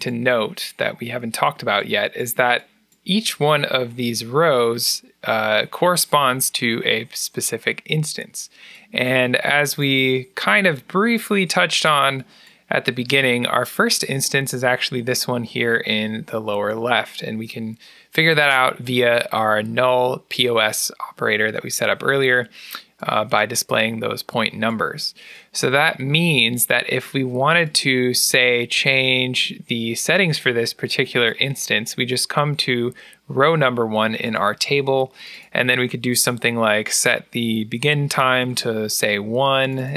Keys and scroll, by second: 34.7 a, 38.3 1.